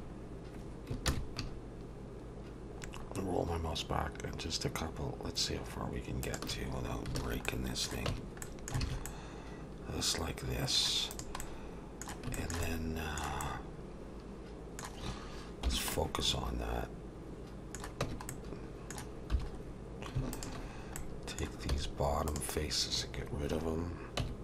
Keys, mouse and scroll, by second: 0.0-0.6 scroll up 1, 0.6-0.9 scroll up 1, 1.1 ctrl+b, 6.7-7.1 scroll down 2, 7.2 alt+a, 7.5 middle click, 8.1 Tab, 8.4 middle click, 8.8 alt+a, 9.1 middle click, 11.4 middle click, 12.3 shift+middle click, 12.6 middle click, 13.4 middle click, 13.8 shift+middle click, 15.7 /, 15.9 middle click, 18.0 Tab, 18.3 middle click, 19.3 3, 19.5-20.2 scroll up 1, 20.2 scroll up 1, 20.3 alt+shift+click, 21.0 middle click, 21.7 x, 24.2 Tab.